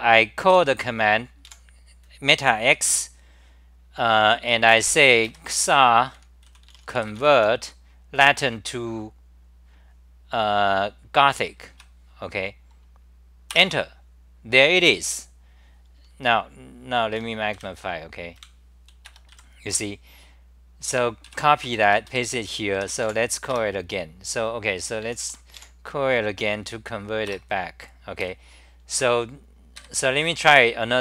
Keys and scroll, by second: 0.5 g, 2.0 a, 11.7 Right, 13.5 Return, 17.7 super+=, 20.9-23.6 typing, 21.6 Return, 25.1 ctrl+u, 27.3 Return, 28.2 ctrl+g, 28.9 2.